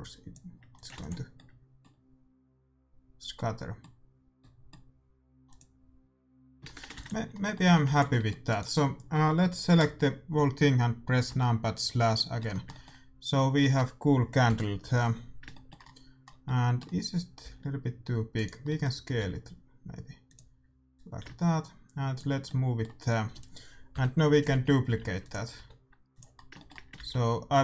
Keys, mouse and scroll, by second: 0.7-2.6 drag, 0.9 ctrl+s, 1.3-2.5 middle drag, 2.6 middle click, 3.4-5.5 middle drag, 5.5-7.2 drag, 6.7 shift+z, 6.9 ctrl+s, 7.6 a, 7.8 ctrl+s, 8.4-10.2 right drag, 11.2 KP_Divide, 11.8-12.8 middle drag, 14.4 KP_7, 16.7 middle click, 16.9 middle click, 17.4 s, 19.1 s, 20.9-22.5 drag, 22.5-24.1 middle drag, 23.9 KP_7, 24.8 g, 25.5 r, 26.3-27.6 middle drag, 26.9-27.6 typing.